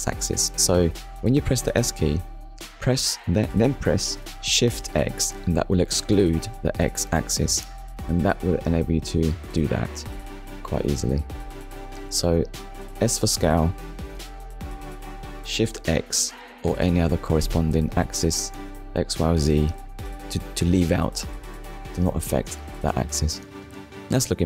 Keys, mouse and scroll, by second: 1.3 click, 4.4 Tab, 5.0 middle click, 6.4 click, 7.3 click, 8.0 scroll down 1, 8.7 middle click, 12.8 shift+middle click, 15.2 middle click, 16.6-16.9 scroll up 1, 17.8 middle click, 18.9 KP_1, 20.1 scroll up 1, 22.0 Tab.